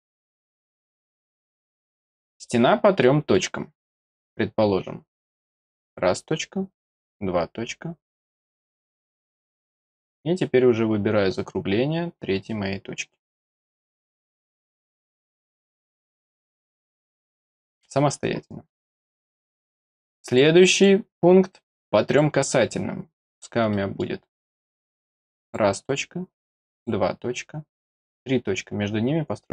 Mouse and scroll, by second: 0.4 click, 1.0 click, 1.5 click, 2.4 click, 3.0 middle click, 5.8 click, 7.0 click, 13.2 click, 16.0 click, 16.7 middle click, 18.7 middle click, 19.8 click, 20.2 click, 20.7 click, 22.0 click, 23.1 middle click, 23.7 middle click, 25.4 click, 26.7 click, 28.0 click.